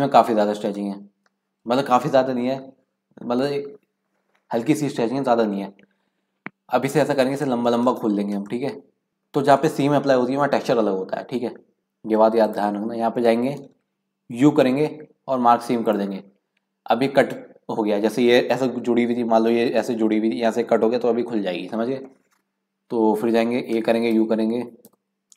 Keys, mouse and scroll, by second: 0.1-0.7 scroll up 1, 0.7-3.9 shift+middle drag, 8.5-10.5 middle drag, 12.4 click, 14.3 u, 23.7 a, 24.1 i, 24.9 y.